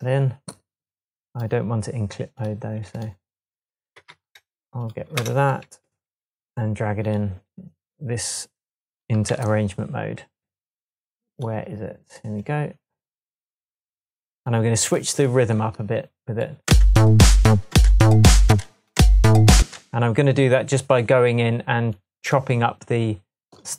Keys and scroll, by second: 4.0 super+c, 5.2 BackSpace, 5.8 Tab, 9.3 super+t, 16.7 space, 17.5 space, 18.5 space, 19.6 space.